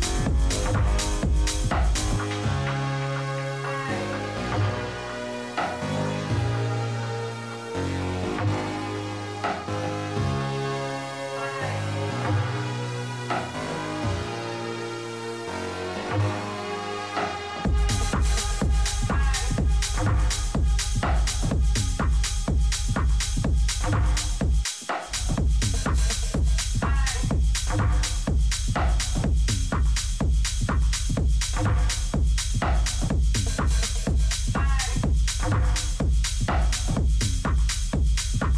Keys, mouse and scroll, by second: 0.9-2.8 drag, 4.8 middle click, 5.5 a, 6.3-8.1 middle drag, 9.8-11.1 middle drag, 11.1-12.8 right drag, 11.7 a, 14.2-15.8 middle drag, 17.5-19.1 right drag, 19.4 click, 19.6 a, 20.0 a, 21.1-23.0 right drag, 23.5 a, 24.0-26.6 right drag, 26.5 Delete, 29.0-33.6 right drag, 30.4 click, 30.8 a, 31.0 a, 31.7 click, 33.6 middle click, 34.4 click, 35.2 e, 38.3 s.